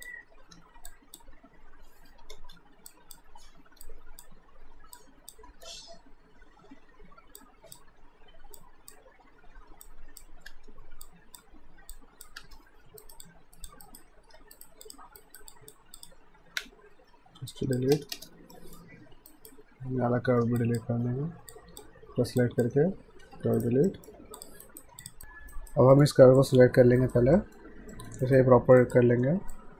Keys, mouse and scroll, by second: 0.6 Return, 0.9 click, 2.4 ctrl+z, 2.9 click, 5.5 Return, 7.4 click, 10.5 Return, 11.0 click, 12.4 Return, 13.0 alt+right click, 13.2 click, 13.9 right click, 14.4 q, 14.5 right click, 14.9 click, 15.2 right click, 15.5 click, 16.8 alt+shift+d, 17.5 alt+click, 17.9 space, 18.5 alt+middle click, 19.3 alt+right click, 20.6 ctrl+click, 22.4 ctrl+click, 23.6 right click, 23.9 alt+middle click, 24.4 click, 24.7 right click, 25.0 click, 25.2 right click, 25.5 right click, 26.0 middle click, 26.4 click, 27.0 alt+right click, 27.4 alt+middle click, 28.2 right click, 28.8 click, 29.2 w, 29.6 click.